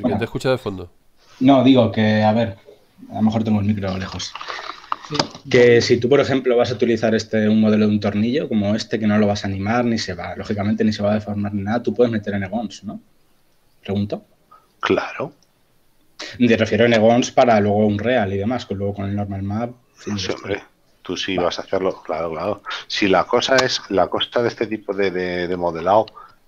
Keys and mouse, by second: 12.0 click, 17.6 shift+middle click, 19.0 shift+middle click, 20.3 shift+middle click, 21.3 shift+middle click, 24.0 shift+middle click, 25.3 shift+middle click.